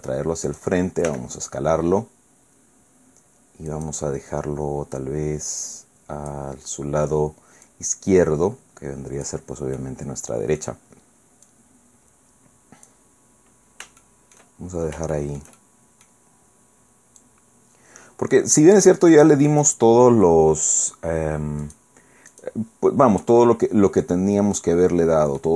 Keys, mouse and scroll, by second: 0.5 click, 1.1 s, 3.7 click, 4.9-6.5 drag, 7.7-9.5 drag, 9.8-10.8 drag, 11.5-13.1 drag, 14.0 shift+click, 15.1 shift+click, 15.6 shift+scroll down 2, 16.1 scroll up 2, 17.2-19.8 drag, 21.6 click, 22.3 click, 23.2-24.2 middle drag, 24.2 scroll down 1, 24.6-25.5 middle drag.